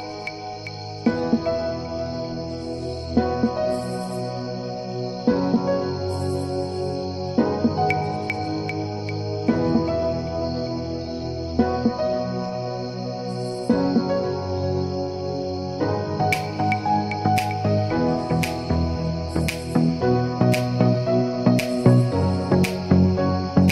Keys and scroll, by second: 10.3 2, 10.7 Return, 17.6 2, 18.0 Return, 21.4 2, 21.9 Return.